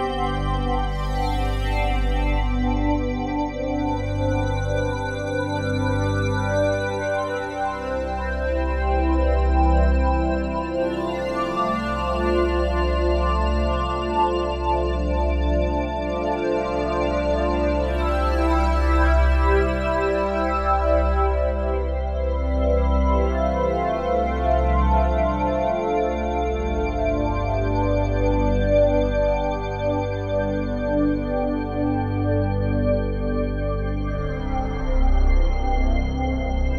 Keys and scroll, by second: 12.7 s, 17.6 a, 19.4 a, 21.1 a, 29.1 s.